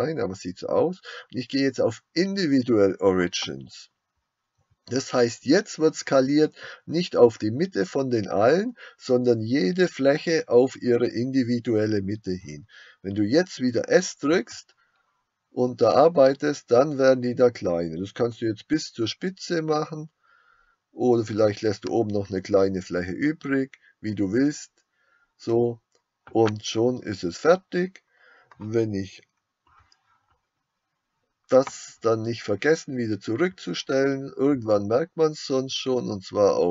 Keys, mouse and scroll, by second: 14.4 5.